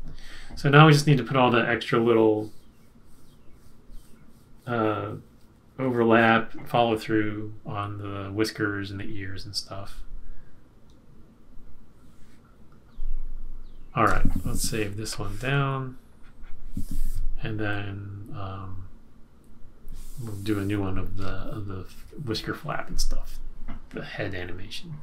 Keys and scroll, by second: 14.0 Return.